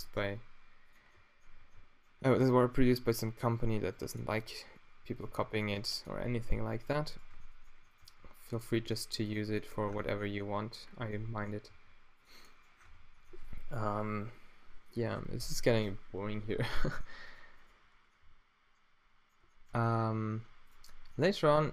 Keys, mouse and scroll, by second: 0.2 s, 3.3 g, 4.2 s, 5.3 g, 8.0 g, 8.8 s, 11.7 g, 12.3 click, 12.8 Tab, 16.3 Tab, 17.3-19.0 middle drag, 20.2 g.